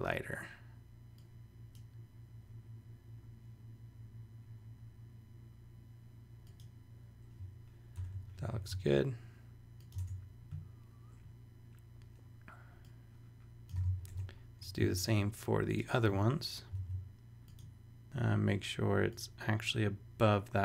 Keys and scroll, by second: 8.0 super+Return, 8.5 shift+super+e, 10.1 super+Tab, 14.1 super+Tab, 14.7 super+v, 15.2 alt+shift+v, 16.8 alt+shift+super+z, 18.0 super+Return.